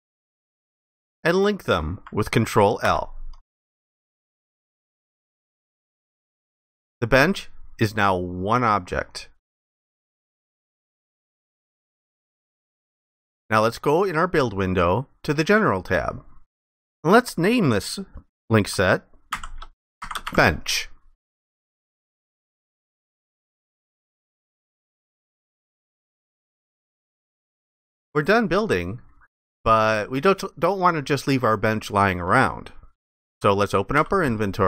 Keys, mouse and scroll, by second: 2.9 ctrl+i, 11.0 alt+click, 19.1-20.8 typing, 24.8 alt+click, 28.7 alt+click, 29.7 ctrl+alt+click, 34.0 ctrl+i.